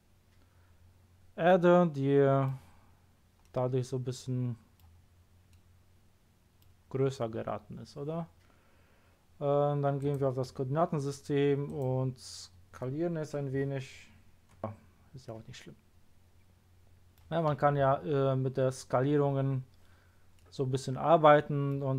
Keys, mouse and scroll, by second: 2.7-3.2 scroll down 1, 3.4-4.7 middle drag, 5.0-5.3 scroll down 1, 5.5-6.6 middle drag, 6.8-7.2 scroll up 1, 10.0 click, 11.6 click, 14.6 scroll up 1, 14.7-15.0 scroll down 1, 15.2-16.4 middle drag, 20.4-21.9 middle drag.